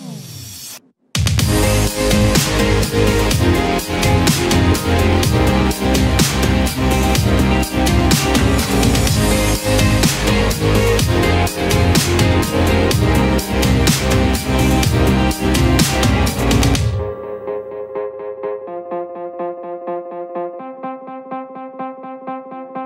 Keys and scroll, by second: 4.1 ctrl+z, 21.3 ctrl+z, 21.5 ctrl+q.